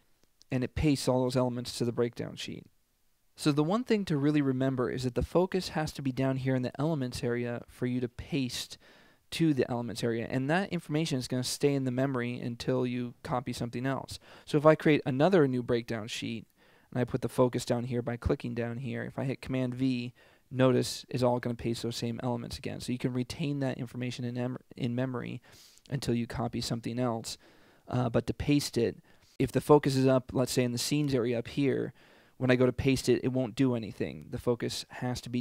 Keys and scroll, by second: 19.8 super+v.